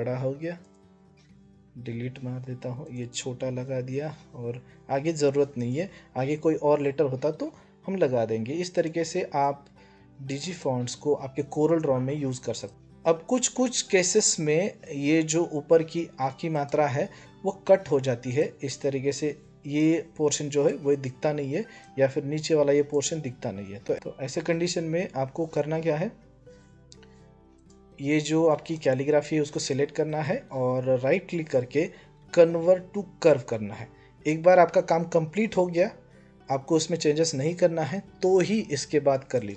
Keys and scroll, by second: 1.5 Delete.